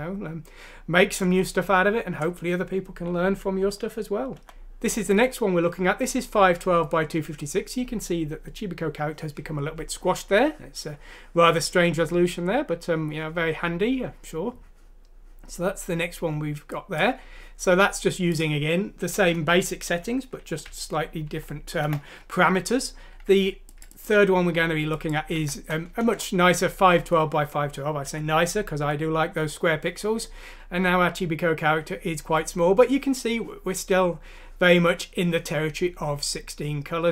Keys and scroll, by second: 3.6 End, 4.3 End, 19.2 Down, 19.9 Home, 20.7-21.3 typing, 25.4 F6, 26.0 Return, 28.1 End, 28.8 End.